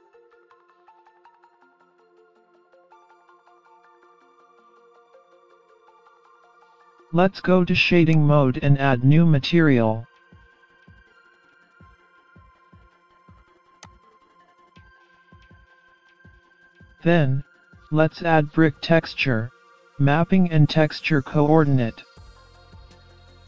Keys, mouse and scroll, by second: 3.4 scroll down 3, 3.6 scroll up 3, 4.0 middle click, 9.4 click, 10.3 scroll down 3, 11.0 scroll up 1, 11.4 middle click, 13.8 click, 15.3 middle click, 18.1 shift+a.